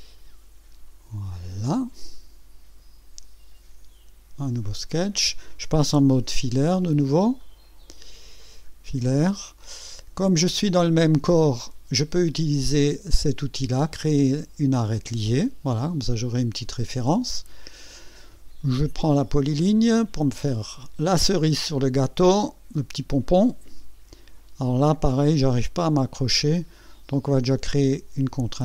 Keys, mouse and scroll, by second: 1.3 click, 4.9 scroll up 1, 7.4 click, 8.4 click, 13.9 click, 15.3 click, 17.3 right click, 20.1 click, 23.4 click.